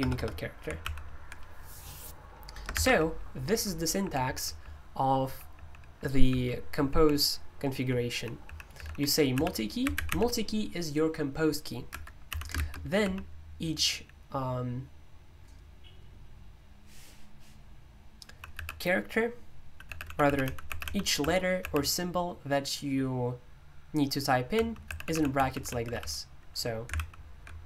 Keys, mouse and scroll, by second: 0.1 BackSpace, 0.8 super+l, 2.7-10.5 typing, 8.8 Escape, 11.8 Escape, 12.0-13.0 typing, 18.2 typing, 19.6-22.1 typing, 24.5-25.6 typing, 26.9 super+l, 26.9 typing.